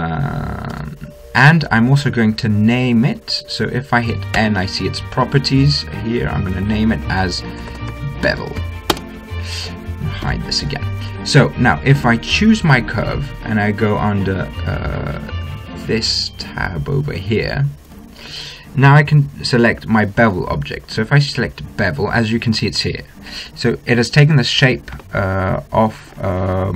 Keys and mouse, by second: 1.0 s, 4.6 n, 6.7-8.6 drag, 10.5 n, 12.7-13.7 right drag, 14.3 click, 17.0-20.0 drag, 20.3-22.1 drag.